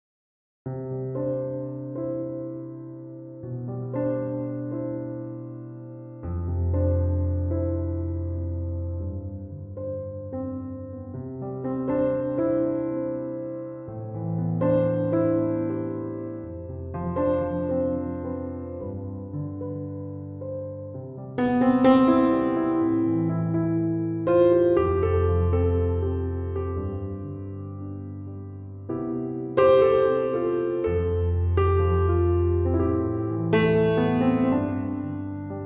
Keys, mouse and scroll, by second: 0.1 Return, 17.2 Escape, 30.8 Escape.